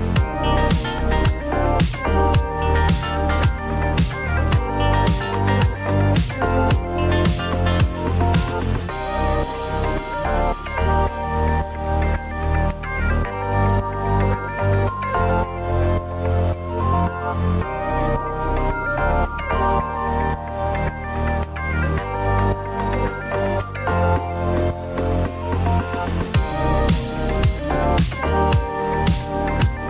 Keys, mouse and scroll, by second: 1.8 right click, 4.3 click, 5.4 click, 7.3 click, 7.4-8.3 typing, 9.3 middle click, 9.4 middle click, 9.5 middle click, 11.6 click, 11.8-12.6 typing, 12.9 Return, 14.4 click, 15.3 click, 19.0 scroll, 19.8 click, 20.3 click, 22.5 click, 23.8 click, 24.9 ctrl+d, 26.9 right click, 28.3 click, 29.0-29.8 typing.